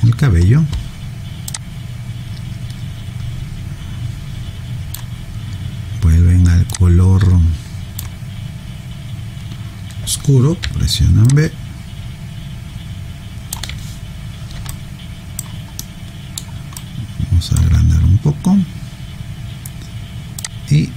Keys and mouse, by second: 0.2 click, 1.5 click, 6.7 click, 10.6 b, 11.2 click, 14.7 alt+right click, 15.8 alt+middle click, 16.8 alt+right click, 20.4 click.